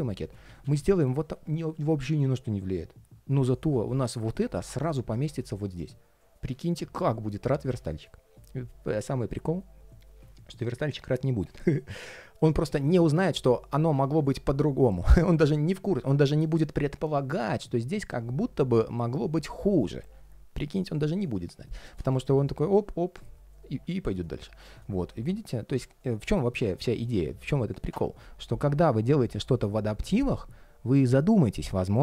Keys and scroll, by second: 0.2 shift+super+z.